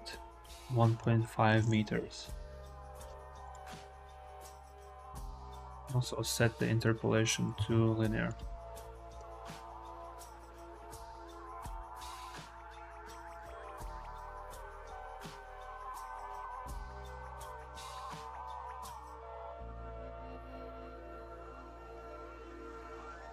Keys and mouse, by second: 2.0 i, 3.3 click, 5.3-6.6 drag, 7.4 t, 8.7 click, 9.0 space, 9.7 click, 18.3 n, 19.6 click, 22.6 space, 22.8-23.3 drag.